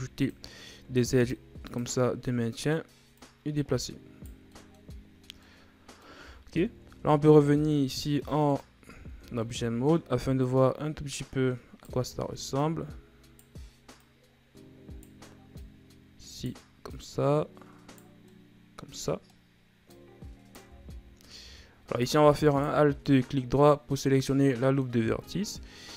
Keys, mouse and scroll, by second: 0.8 ctrl+r, 2.0-3.1 middle drag, 3.1 right click, 4.5 middle click, 5.2 scroll down 3, 5.4 middle click, 6.2 Tab, 7.1-8.2 shift+scroll up 6, 8.2-8.8 middle drag, 8.8 scroll up 1, 9.0 Tab, 9.4-10.4 middle drag, 10.4-12.1 right drag, 12.1 ctrl+z, 12.6-14.0 right drag, 15.5 right click, 16.9 right click, 18.2-19.8 middle drag, 19.8 right click, 20.7 ctrl+z, 22.4 alt+right click, 22.8 scroll down 1, 23.0-25.3 middle drag, 25.3 scroll up 1.